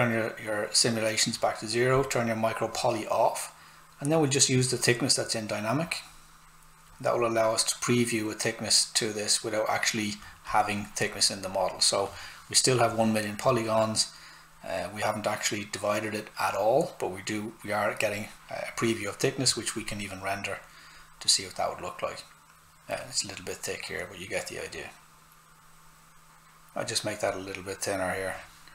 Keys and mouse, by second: 4.7 click, 10.8 click, 17.7 click, 27.2 click.